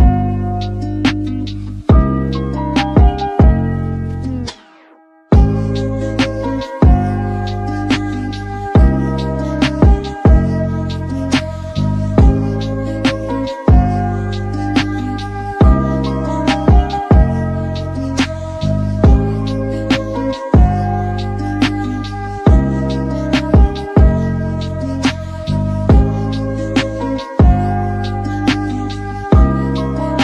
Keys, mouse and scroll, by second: 0.0 alt+g, 0.3-0.9 shift+middle drag, 0.9 s, 2.2 s, 4.0 g, 4.8 scroll down 4, 5.0-6.5 middle drag, 6.5-6.8 scroll up 5, 6.8-7.2 drag, 7.2 KP_7, 7.4 scroll up 5, 7.7-8.3 shift+middle drag, 8.3 shift+a, 9.8 KP_1, 10.5 s, 11.2 g, 12.1 s, 13.2 s, 14.2 g, 15.3 scroll down 3, 15.8 KP_7, 16.0-16.7 scroll up 9, 16.4 Tab, 16.8 shift+middle click, 17.2 click, 18.2 x, 19.2 alt+click, 19.5 middle click, 19.8 scroll down 6, 20.1 a, 20.4 alt+click, 20.7 alt+click, 21.2 g, 22.0 f, 22.4 alt+click, 22.8 f, 23.2 alt+click, 24.0 f, 24.2-24.6 scroll down 4, 24.6 KP_1, 25.0 Tab, 26.3 shift+scroll down 1, 26.4-27.4 shift+middle drag, 27.4 z, 27.9-28.5 shift+middle drag, 28.5 click, 29.7-30.2 shift+middle drag.